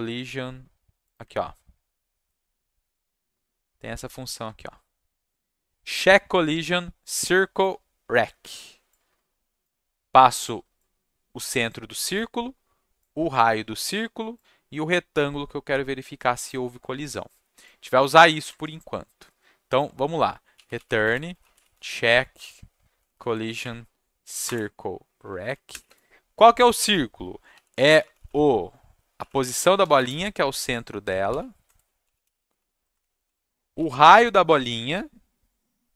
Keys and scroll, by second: 18.5 alt+Tab, 20.2-22.4 typing, 22.9 Down, 23.1 Down, 23.2 Down, 23.6 Up, 24.4 Return, 25.7 shift+9, 27.2-34.2 typing.